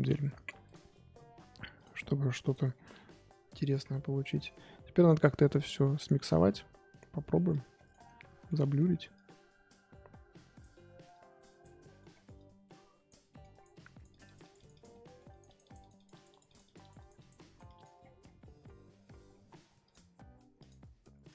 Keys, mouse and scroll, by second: 0.6-2.7 drag, 2.7-3.1 scroll down 8, 3.1 middle click, 3.8-5.6 scroll up 9, 5.6 click, 6.0 shift+middle click, 6.2-7.5 scroll up 3, 7.5 click, 8.0 scroll down 3, 8.2 middle click, 8.8-9.1 scroll up 2, 9.1-10.7 drag, 10.7 middle click, 11.1 click, 11.8 middle click, 12.4 click, 13.3 middle click, 13.4-14.9 drag, 14.9 middle click, 15.3-18.0 drag, 18.0-18.4 scroll down 10, 18.4 middle click, 18.8-19.5 scroll up 4, 19.9-20.9 drag, 20.9-21.3 scroll up 7.